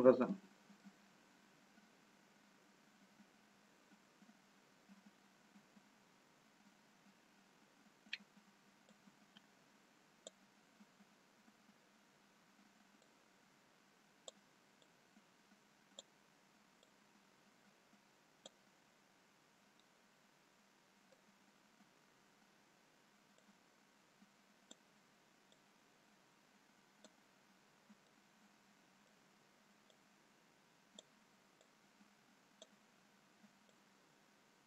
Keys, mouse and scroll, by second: 0.3 middle click, 1.1-1.9 scroll down 2, 2.2-3.1 scroll up 2, 10.1 click, 13.1 click, 14.9 click, 19.7 scroll up 1, 20.2 middle click, 21.6 scroll up 1, 23.8 click, 25.6 click, 28.3 middle click, 30.2 click, 31.9 click.